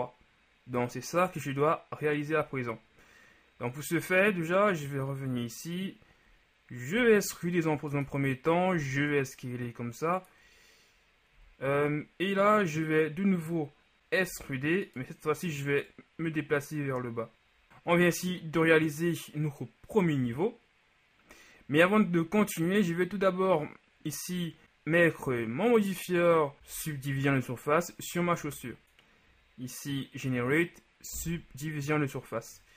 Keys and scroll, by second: 7.1 e, 11.4 z, 14.0 ctrl+z, 14.4 e, 26.9 Tab.